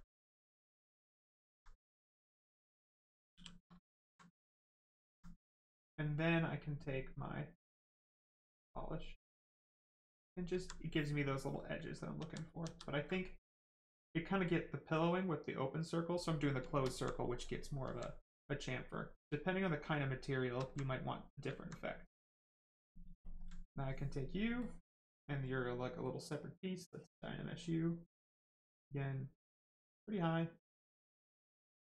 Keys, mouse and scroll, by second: 2.0 right click, 3.3 shift+f, 4.0 alt+right click, 4.7 alt+right click, 4.8 alt+right click, 5.6 click, 5.6 click, 8.4 click, 10.0 right click, 10.5 alt+right click, 11.7 ctrl+right click, 12.1 ctrl+z, 14.0 click, 16.3 right click, 16.6 shift+right click, 16.8 alt+right click, 17.2 right click, 17.2 right click, 18.7 click, 19.9 right click, 20.3 shift+right click, 20.6 alt+right click, 20.9 right click, 21.0 right click, 21.5 alt+right click, 22.2 alt+right click, 23.6 right click, 24.6 click, 26.8 click, 29.0 click, 31.2 click.